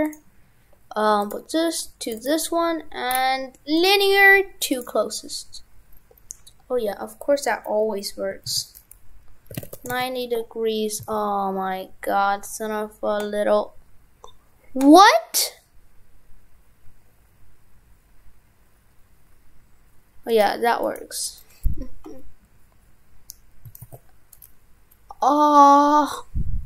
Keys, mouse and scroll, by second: 3.1-3.8 scroll down 1, 3.8 click, 3.8-6.2 scroll down 1.